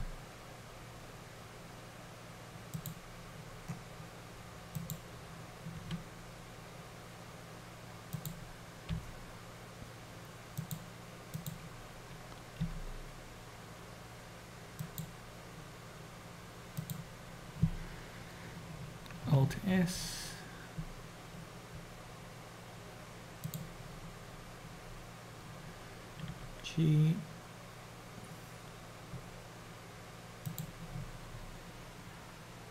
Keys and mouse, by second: 4.9 click, 6.0 g, 11.4 click, 13.0 g, 16.8 click, 19.5 alt+s, 26.4 g.